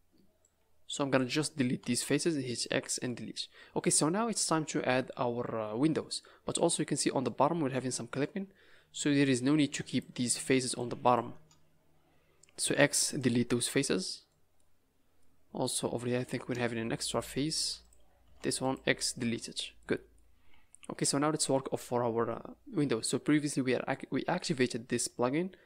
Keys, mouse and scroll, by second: 0.4 click, 1.7 x, 3.0 middle click, 6.2 middle click, 7.5 scroll up 4, 7.7 middle click, 9.1 click, 9.9 shift+click, 10.3 click, 10.7 click, 11.2 click, 12.7 x, 13.5 scroll down 5, 14.0 middle click, 14.5 middle click, 15.4 scroll up 2, 15.6 middle click, 16.1-16.7 scroll up 2, 16.7 shift+middle click, 17.2 scroll up 2, 17.8 click, 18.2 x, 19.2 Tab, 19.4 scroll down 6, 19.7 middle click, 20.4 a, 20.5 a, 20.7 scroll down 2, 21.0 middle click, 22.8 scroll up 1, 23.2-24.0 scroll down 3.